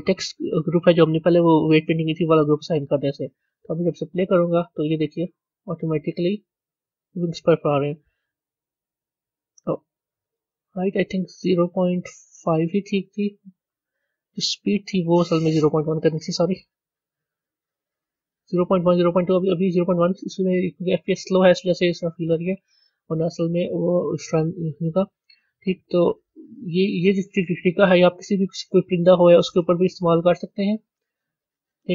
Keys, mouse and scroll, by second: 10.3-13.3 drag, 14.8-17.9 drag, 27.0 click, 28.0-30.9 middle drag.